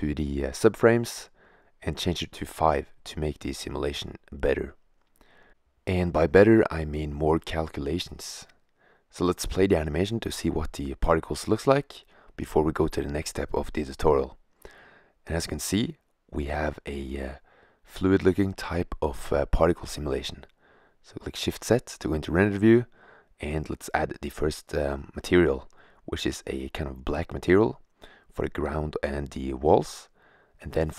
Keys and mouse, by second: 0.9-1.6 middle drag, 1.6-2.6 drag, 12.7-13.1 drag, 13.3 middle drag, 13.5 click, 13.8 middle click, 15.8 click, 17.8 click, 18.8 middle click, 20.1 shift+z, 22.2 right click.